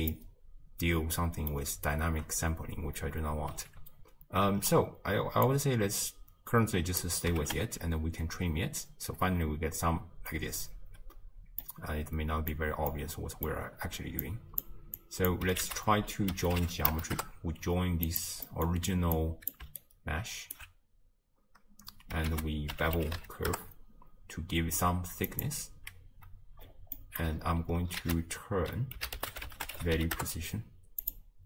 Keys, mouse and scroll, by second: 5.8-7.5 drag, 7.5 shift+space, 10.8 space, 11.7-14.3 middle drag, 14.3-14.6 drag, 17.2 ctrl+a, 19.2-20.6 drag, 20.6-23.5 alt+right drag, 23.5 ctrl+a, 30.5 ctrl+a.